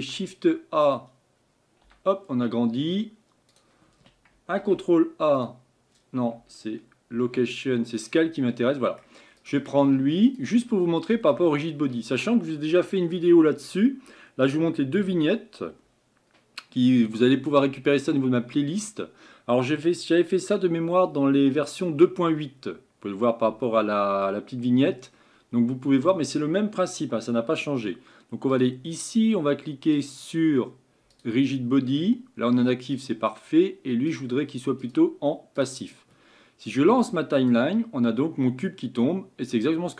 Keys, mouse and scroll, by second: 8.7-11.3 middle drag, 28.5-33.0 drag, 34.1-39.9 drag.